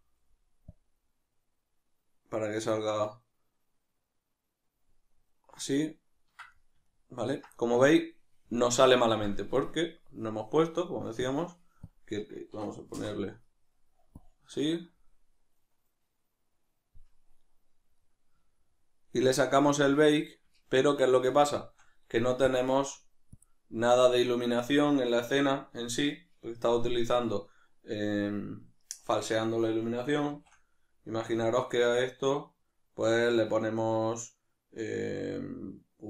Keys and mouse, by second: 0.6-5.3 drag, 5.3-11.2 ctrl+middle drag, 11.2-18.0 drag, 13.0 Return, 18.0-22.5 middle drag, 22.5-25.3 drag, 25.3-36.0 middle drag.